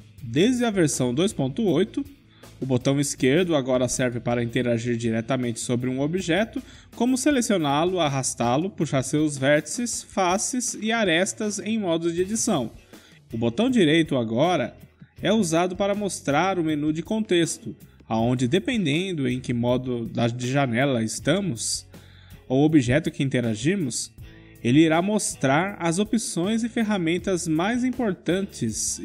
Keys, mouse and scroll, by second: 12.8-14.3 middle drag, 14.3-17.0 right drag, 17.9 click, 20.0 right click, 21.1 click, 21.6 Tab, 22.4-23.5 drag, 23.5-25.0 right drag, 25.0 click, 25.2-27.4 right drag, 27.4 Tab, 28.0 click.